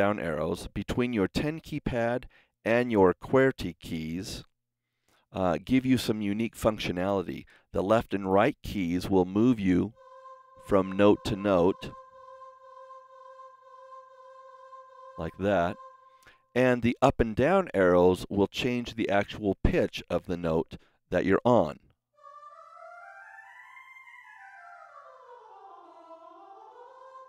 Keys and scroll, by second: 9.8 Left, 12.9 Right, 22.0 Up, 23.9 Down, 26.0 Up.